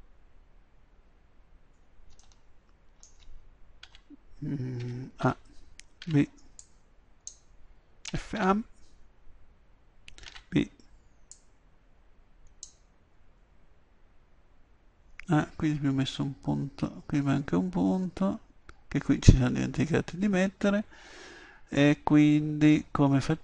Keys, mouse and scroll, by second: 2.2-5.2 middle drag, 3.8 b, 5.2 a, 6.0 b, 8.1 f, 8.4 a, 10.3 b, 13.4-15.4 drag, 15.7 middle click, 16.4-23.4 drag.